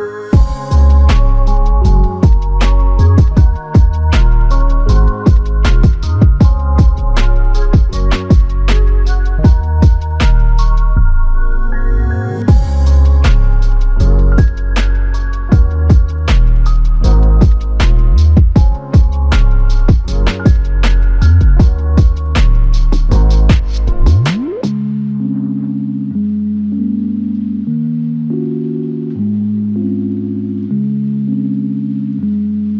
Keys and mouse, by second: 2.0 alt+click, 3.6 double click, 4.4 alt+click, 7.5 double click, 10.2 alt+click, 11.7 double click, 12.5 alt+click, 14.7 alt+click, 16.9 alt+shift+click, 18.4 typing, 22.0 typing, 30.1 shift+click.